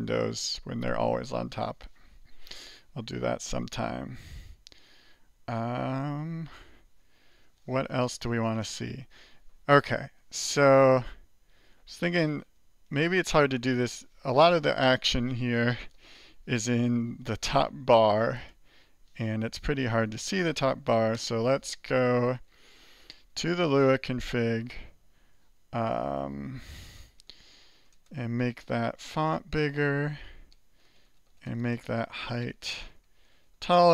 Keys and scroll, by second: 6.2 ctrl+l, 6.7-10.5 typing, 10.8 alt+1, 12.0 alt+3, 12.6 alt+1, 13.3 alt+2, 13.9 alt+3, 15.9 alt+Return, 16.5-17.5 typing, 19.1-21.1 typing, 21.1 Return, 23.4 ctrl++, 23.7 ctrl++, 25.6-28.8 typing, 29.8-33.9 typing.